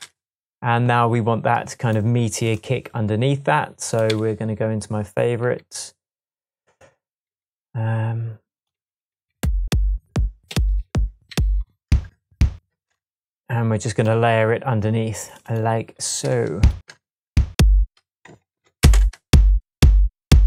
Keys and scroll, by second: 4.1 Right, 5.4 Left, 5.5 Left, 7.3 Right, 8.8 Right, 9.1 Down, 10.1 Down, 10.5 Up, 10.9 Down, 11.3 Up, 11.9 space, 12.7 space, 18.5 Tab, 18.8 space, 19.7 space.